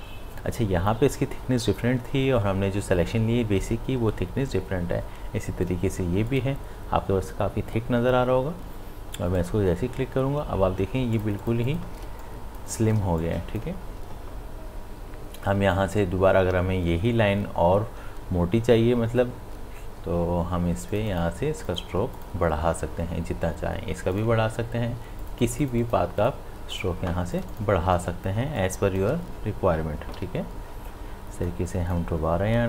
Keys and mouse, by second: 6.3 click, 9.4 click, 11.0 space, 11.2 ctrl+click, 12.0 ctrl+space, 12.2 click, 12.6 space, 13.2 click, 13.5 space, 20.9 space, 20.9 click, 27.1 space, 27.3 ctrl+alt+click, 28.4 space, 28.6 click, 28.9 space, 30.2 b, 31.5-32.6 drag.